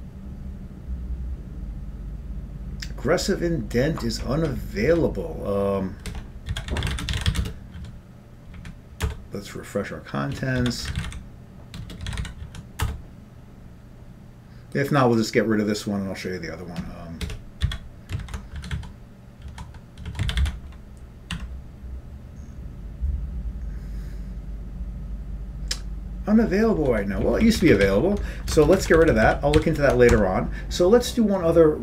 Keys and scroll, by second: 4.4 Up, 4.8 Up, 5.1 Up, 6.1 Escape, 6.6-7.9 typing, 8.2 Down, 8.8 Up, 9.6 Return, 10.8-12.3 typing, 12.6 Down, 13.0 Return, 17.5 Escape, 17.9 x, 18.3 ctrl+g, 18.9 Down, 19.6 Down, 20.6 Down, 20.6 ctrl+c, 21.9 y, 26.9 Down, 27.4 Up, 27.8 Up, 28.4 Up, 28.9 ctrl+shift+space, 28.9 ctrl+n, 29.3 ctrl+n, 29.8 ctrl+w, 30.3 Tab.